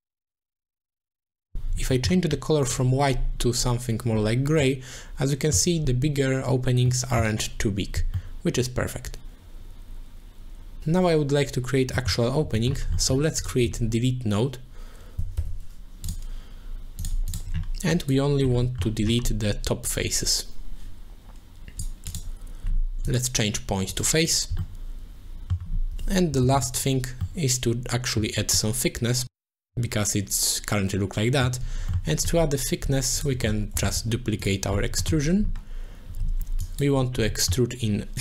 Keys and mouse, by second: 0.6 click, 1.3 middle click, 2.0 middle click, 2.6 click, 4.7 middle click, 6.9 middle click, 8.2-10.8 middle drag, 11.9 middle click, 12.7 middle click, 13.0 middle click, 13.4 click, 16.1 shift+a, 17.3 click, 17.9 click, 18.7 middle click, 19.8-21.8 drag, 22.1 click, 23.2 click, 24.3 click, 24.6-25.6 middle drag, 26.4 shift+b, 27.2-28.2 middle drag, 28.6-31.5 middle drag, 31.9 middle click, 33.2 click, 33.4 middle click, 33.9 shift+d, 34.4 click, 35.1 middle click, 36.8 click, 37.3 middle click.